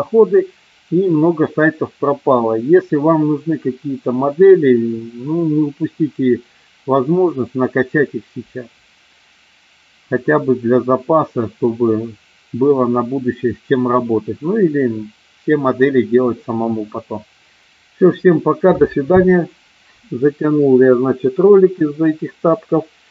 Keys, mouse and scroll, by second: 17.6 space.